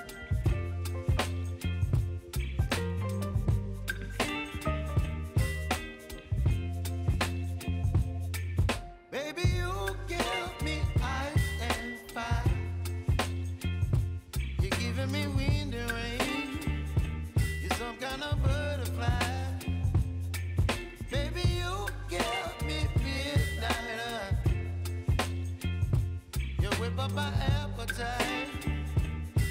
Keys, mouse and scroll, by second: 0.0-2.5 typing, 3.5 click, 7.5 ctrl+i, 8.9-15.9 drag, 15.9 click, 19.4 scroll down 1, 21.1 click, 22.0 Return, 22.7-24.4 typing, 26.2 click.